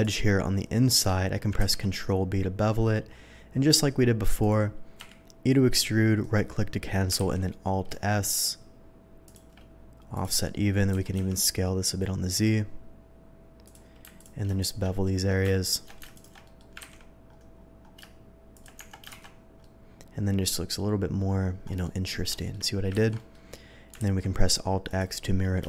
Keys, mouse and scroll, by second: 1.6 ctrl+b, 4.4 click, 5.0 e, 6.2 right click, 7.1 alt+s, 9.2 shift+click, 10.1 shift+click, 10.9 s, 11.1 z, 11.4 s, 13.6 click, 14.1 alt+click, 14.6 alt+shift+click, 15.0 alt+shift+middle click, 15.6 alt+shift+click, 16.1 alt+shift+click, 16.4 middle click, 16.8 ctrl+b, 17.6 middle click, 18.5 shift+click, 18.7 Tab, 19.2 shift+2, 19.6-20.7 middle drag, 21.4 scroll down 1, 21.7 middle click, 22.3 shift+middle drag, 22.9 ctrl+z, 23.1 middle drag, 24.0 alt+x, 24.8 alt+click.